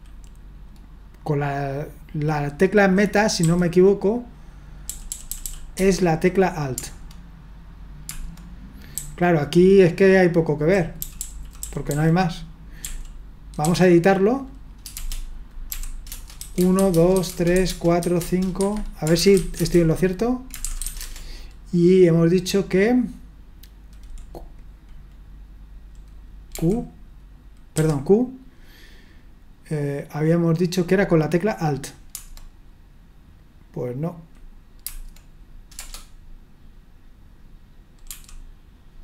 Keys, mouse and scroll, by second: 3.4 typing, 4.9-5.4 typing, 5.7 Return, 8.9-13.6 typing, 15.0-21.5 typing, 18.5 Escape, 26.5 d, 27.8 q, 35.8 Return, 38.1 d.